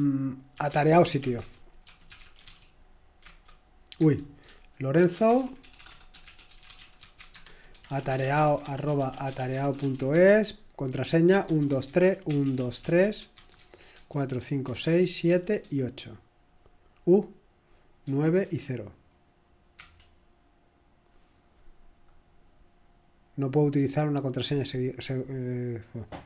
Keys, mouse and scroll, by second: 0.4-2.9 typing, 3.2 Return, 4.0 Tab, 4.7-9.8 typing, 11.3-17.0 typing, 18.0-18.4 typing, 19.8 typing, 23.3 click.